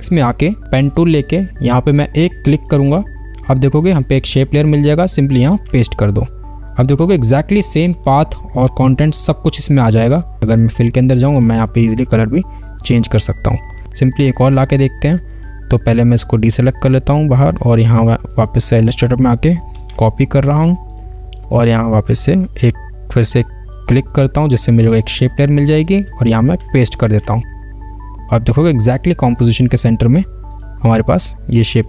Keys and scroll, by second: 5.9 ctrl+v, 20.0 ctrl+c, 27.3 ctrl+v.